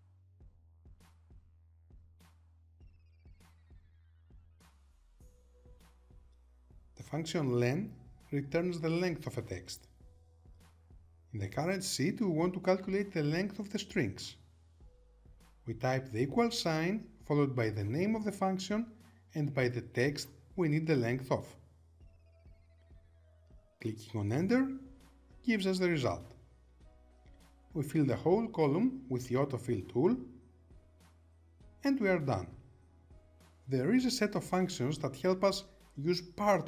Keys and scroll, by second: 0.4 Tab, 4.3 Return.